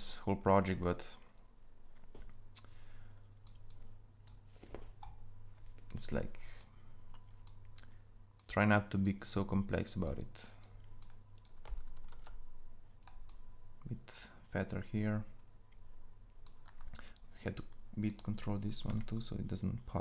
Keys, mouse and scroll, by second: 3.5-11.2 drag, 11.9 ctrl+a, 18.7 g.